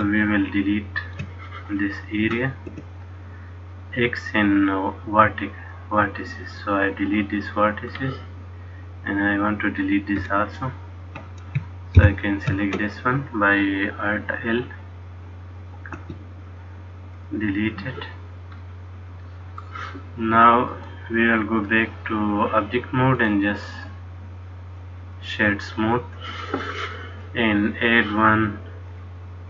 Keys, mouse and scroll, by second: 2.8 x, 7.4 middle click, 10.7 alt+click, 12.1 ctrl+l, 16.1 x, 18.7 middle click, 20.9 click, 23.3 right click, 27.9 click, 29.0 click.